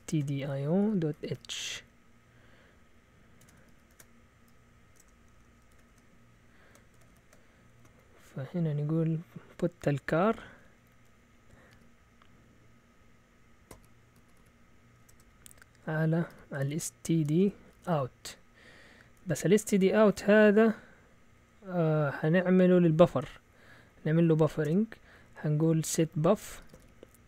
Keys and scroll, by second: 0.0-1.8 typing, 3.1-5.7 typing, 5.9 Return, 6.9 ctrl+w, 7.1 ctrl+w, 7.8 Right, 11.4-12.2 typing, 13.7-20.6 typing, 24.2 Up, 24.7 Return, 25.4-27.2 typing.